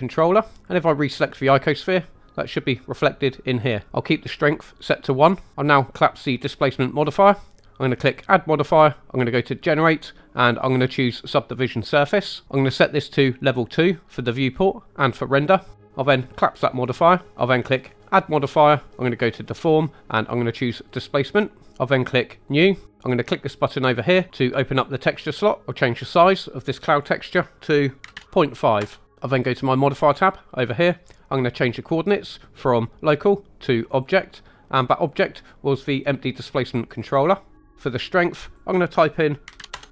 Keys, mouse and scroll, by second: 1.6 click, 6.9 click, 8.1-11.9 drag, 14.4-17.1 drag, 18.1-21.0 drag, 22.5 click, 24.8 click, 26.9-28.8 drag, 29.8 click, 32.4-34.0 drag, 35.0-37.0 drag, 38.4-39.7 drag.